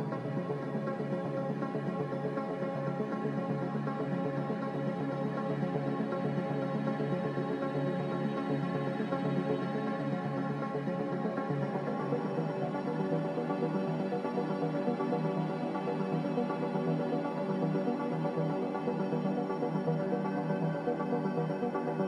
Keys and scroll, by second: 0.6 c, 5.9 ctrl+z, 15.8 Escape, 16.2 z, 19.5 1, 19.5 0, 19.6 Return.